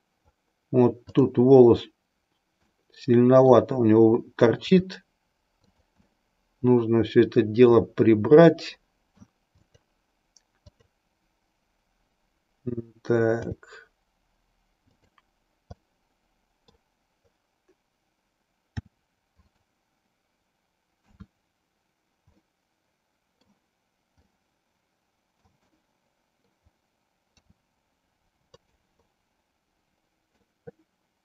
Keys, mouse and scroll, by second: 1.1-1.4 drag, 2.7-3.7 middle drag, 4.7 r, 5.8 click, 6.2-7.9 middle drag, 8.7-9.3 middle drag, 9.7 click, 10.7 click, 13.4 g, 15.1 click, 15.9-16.9 middle drag, 18.8 r, 21.1 KP_3, 22.4-23.5 middle drag, 24.3-25.6 middle drag, 25.7-26.7 middle drag, 27.4 r, 28.5 click, 29.0-30.4 middle drag.